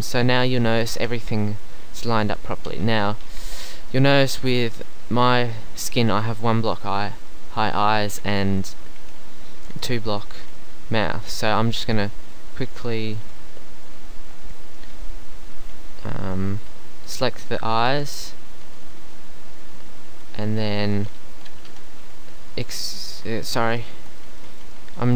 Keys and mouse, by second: 1.8 middle click, 3.4 Tab, 7.3 middle click, 11.5 Tab, 17.2 right click, 18.2-19.6 right drag, 19.6 middle click, 21.7 KP_3, 22.0 z, 22.3-23.3 middle drag, 23.3 z, 23.9 Tab.